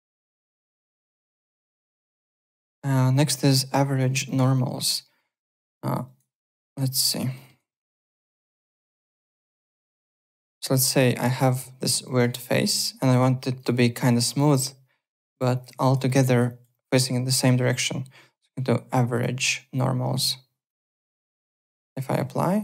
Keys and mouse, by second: 0.1 alt+middle click, 0.4 alt+right click, 0.5 alt+click, 0.7-2.2 typing, 1.5 click, 1.9 click, 2.6 alt+Tab, 3.9 alt+Tab, 4.2 alt+middle click, 4.5 alt+click, 6.0 alt+right click, 6.3 alt+click, 7.1 click, 7.3 alt+middle click, 7.5 alt+right click, 8.2 click, 9.5 click, 10.1 alt+click, 10.4 alt+middle click, 10.6 alt+right click, 10.9 click, 11.1 alt+click, 12.0 alt+click, 12.4 alt+middle click, 12.7 alt+right click, 13.1 click, 13.8 Tab, 13.9 click, 14.3 click, 14.5 click, 15.1 click, 15.3 click, 15.5 click, 15.8 alt+click, 16.0 alt+middle click, 16.2 alt+right click, 16.4 alt+click, 17.2 click, 19.1 click, 20.6 click, 21.9 alt+click, 22.5 click.